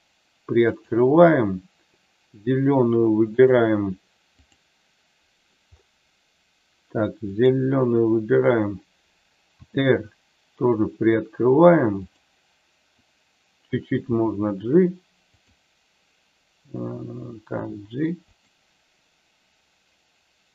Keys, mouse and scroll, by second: 0.7 click, 3.3 click, 7.3 click, 9.5 r, 12.1 click, 14.1 g, 17.5 g.